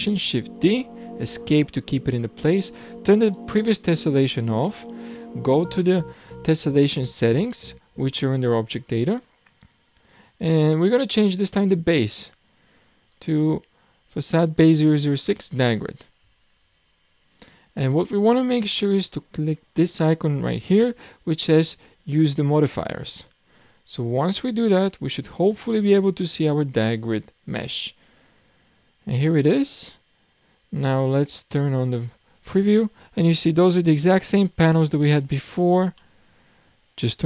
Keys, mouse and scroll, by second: 0.3 shift+d, 3.2 click, 5.4 click, 6.1-8.5 scroll down 7, 11.6 click, 13.1 click, 25.7 click, 27.8 click, 31.5 click, 32.2-32.6 scroll up 5, 32.6-33.5 middle drag, 33.5-34.0 scroll down 5, 35.1-37.2 shift+middle drag.